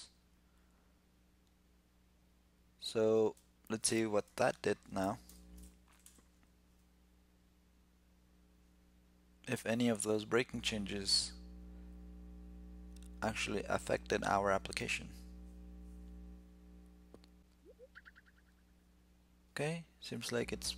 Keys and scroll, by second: 5.0 shift+super+t.